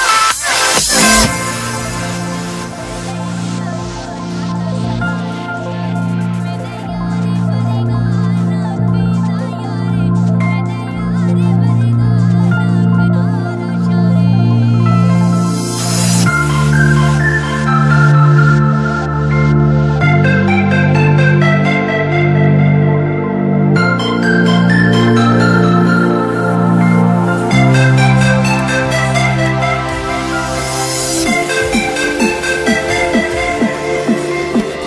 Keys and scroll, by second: 1.3 shift+Page_Up, 1.7 alt+v, 1.8 alt+e, 2.4 shift+F2, 2.8 F3, 5.8 Escape, 10.7 space, 11.8 alt+c, 11.9 alt+w, 12.2 p, 22.3 F3, 23.6 c, 24.0 Escape, 27.7 ctrl+z, 28.3 Escape, 29.7 shift+Page_Up, 31.2 ctrl+Page_Down, 33.4 F3, 33.8 Escape, 34.3 F4.